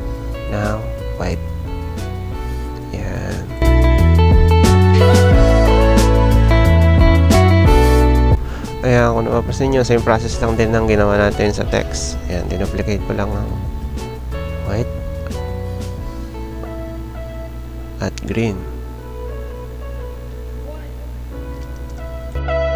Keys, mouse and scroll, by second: 2.5 click, 5.8 ctrl+j, 10.6 ctrl+j, 13.3 ctrl+j.